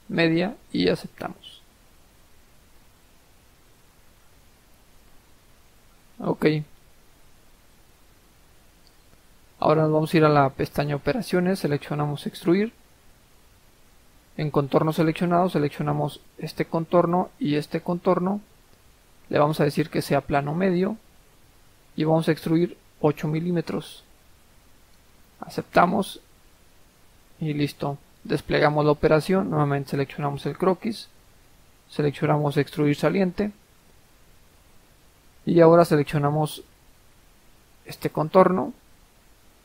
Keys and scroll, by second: 23.3 8.